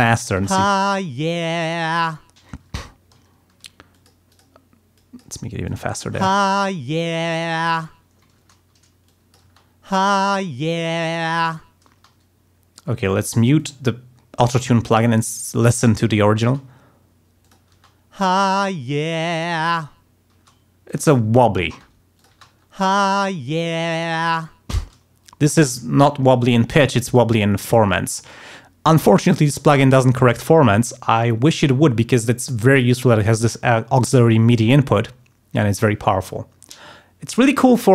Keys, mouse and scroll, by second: 0.2 space, 2.1 ctrl+scroll down 2, 2.6 ctrl+space, 2.8 ctrl+scroll up 2, 3.5 ctrl+d, 3.9 click, 4.2 click, 4.9 click, 5.6 click, 6.1 space, 7.9 ctrl+scroll down 2, 8.3 ctrl+space, 9.0 click, 9.4 space, 11.9 space, 13.5 click, 16.4 space, 17.4 click, 20.3 space, 20.8 click, 21.6 space, 22.1 click, 22.3 space, 24.7 space.